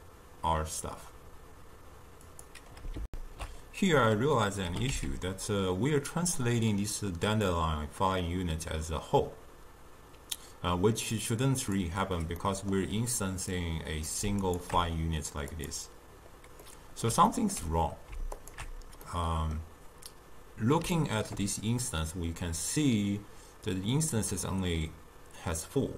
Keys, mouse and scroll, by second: 3.1 ctrl+alt+shift+q, 4.7 g, 12.5-13.6 middle drag, 13.6 click, 14.5 alt+shift+click, 15.6 click, 16.7-18.4 middle drag, 18.4 alt+shift+click, 19.1-24.2 middle drag.